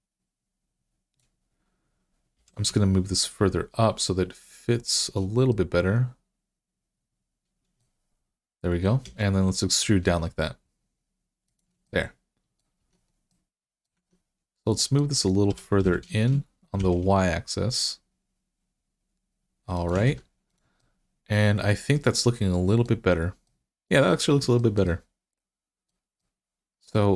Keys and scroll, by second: 2.2 g, 8.9 e, 12.6 Tab, 13.8 Tab, 15.3 g, 15.6 x, 16.6 y, 20.0 Tab.